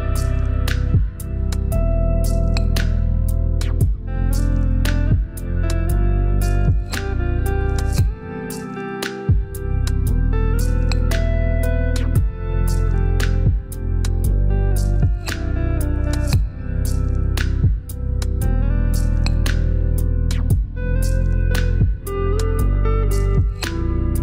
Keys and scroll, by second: 5.9 5, 13.1 shift+=.